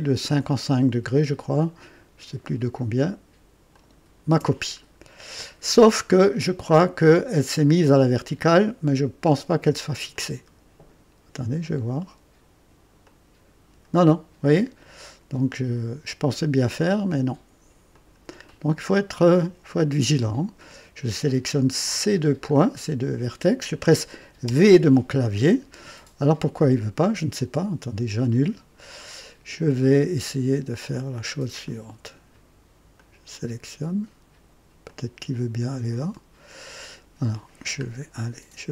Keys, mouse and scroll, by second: 3.7 ctrl+click, 4.9 scroll up 2, 5.6-6.2 right drag, 10.1-11.1 drag, 13.0-14.8 drag, 17.0 scroll up 2, 17.9 click, 18.4-19.2 right drag, 21.8 click, 22.5 scroll down 2, 24.4 v, 28.2 click, 31.6-32.5 drag, 32.9-33.5 drag, 34.8-36.8 drag, 36.8 click, 37.8 scroll up 2.